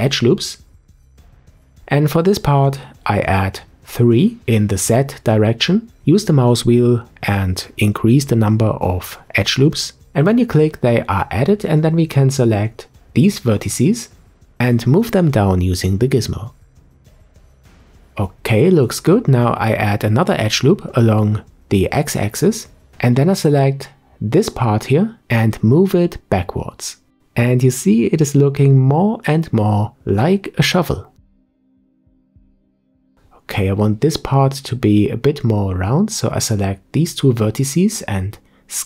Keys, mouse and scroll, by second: 8.3-10.8 scroll up 1, 12.0 click, 12.8 shift+click, 13.6 shift+click, 14.7 click, 18.2 ctrl+r, 21.5 click, 23.5-23.9 scroll down 1, 23.9 middle click, 24.8-25.4 scroll up 1, 25.4 scroll up 4, 27.2 click, 30.5 middle click, 31.4 click, 32.1-35.1 middle drag, 35.1 click, 36.2 shift+click, 37.5 click.